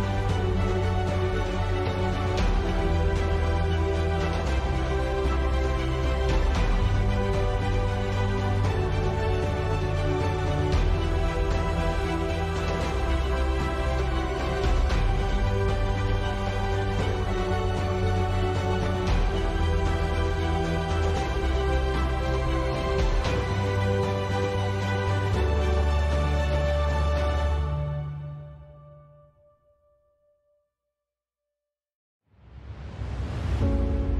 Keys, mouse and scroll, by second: 0.1 g, 0.6 g, 1.1-2.2 middle drag, 2.0 g, 3.1-4.2 middle drag, 4.2 right click, 4.5 x, 5.8 ctrl+z, 6.8 z, 7.0 x, 7.5 click, 7.9 click, 8.3 middle click, 9.6 ctrl+z, 10.1 f, 10.3 ctrl+z, 11.1 alt+middle click, 13.1 i, 14.5 f, 15.0-16.1 ctrl+z, 16.3 ctrl+z, 16.5 Tab, 17.0 Tab, 17.5 g, 18.1-19.3 drag, 18.4 z, 18.8 z, 19.3 Delete, 20.4 right click, 20.6 g, 21.1 g, 21.5-22.8 middle drag, 22.0 Tab, 23.0 middle click, 23.8 KP_1, 24.1 KP_5, 24.8 Tab, 25.7 shift+s, 26.4 KP_5, 27.7 click, 28.3 z, 29.5 z, 29.7 g, 31.3 e, 32.8-33.8 drag, 33.1 ctrl+b.